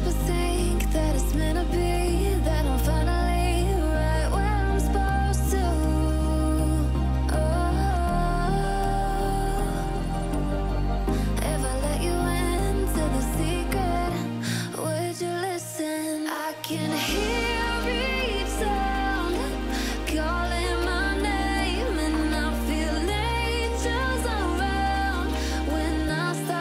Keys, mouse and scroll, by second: 0.8-1.1 alt+scroll down 1, 1.3 alt+scroll up 1, 1.4 click, 2.8 Delete, 3.4-3.9 alt+scroll down 2, 3.9 alt+scroll up 1, 4.0 click, 5.3 ctrl+alt+shift+s, 6.9 click, 7.5-8.4 typing, 8.8 click, 12.4-13.1 drag, 14.3 alt+scroll up 1, 14.9 click, 19.9 alt+scroll down 1, 22.9 ctrl+alt+shift+s, 24.5 click, 25.7 click.